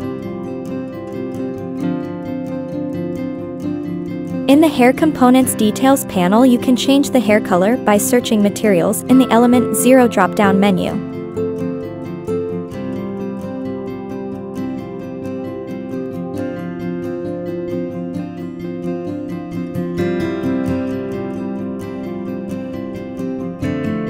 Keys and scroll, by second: 3.2 Up, 3.3 Down, 3.4 Left.